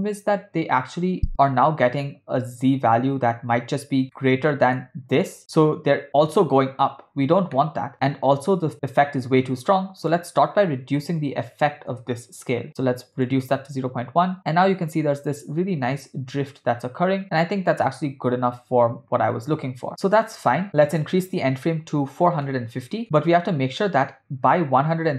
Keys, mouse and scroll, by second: 1.0 space, 3.5 space, 4.2 ctrl+middle click, 7.6 middle click, 10.0-12.0 drag, 13.1 click, 13.6 space, 20.0 space, 20.9-23.0 drag, 23.0 space.